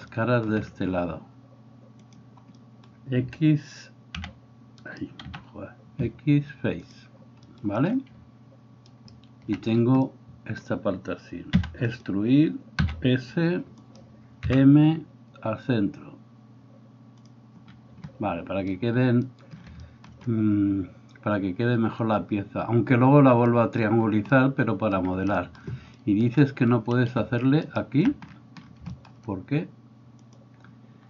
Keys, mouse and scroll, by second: 4.2 c, 5.4 x, 9.0 alt+middle click, 9.0 alt+right click, 11.6 e, 12.2-30.3 middle drag, 12.9 s, 14.6 m, 27.6 alt+right click, 30.3-31.0 drag.